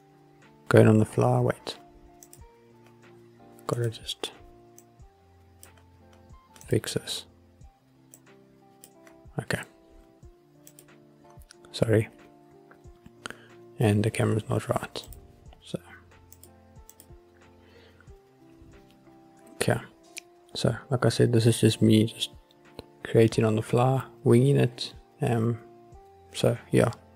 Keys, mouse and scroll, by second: 2.4 click, 3.9 click, 4.9 click, 6.7 click, 8.3 click, 10.8 click, 15.2-16.0 drag, 16.5 click, 17.0 click.